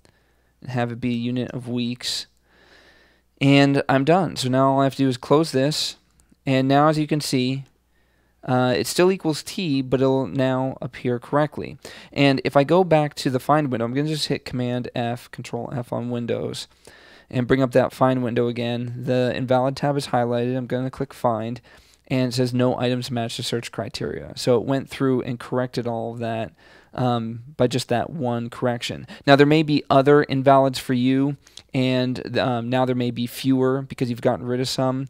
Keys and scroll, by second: 15.5 super+f.